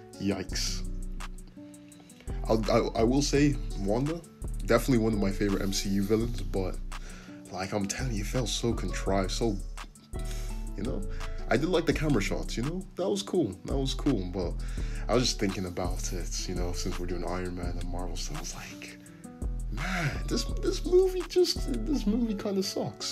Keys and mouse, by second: 0.3 c, 1.0-3.3 middle drag, 3.3 click, 3.3 middle click, 3.6-6.7 drag, 5.9 c, 6.7-7.7 middle drag, 6.9 c, 7.7-10.3 drag, 8.1 c, 10.3-13.7 middle drag, 11.1 g, 12.5 Tab, 13.2 alt+z, 13.7 click, 13.9-19.5 middle drag, 18.8 Tab, 19.5-23.1 drag, 19.6 Tab, 20.9 `.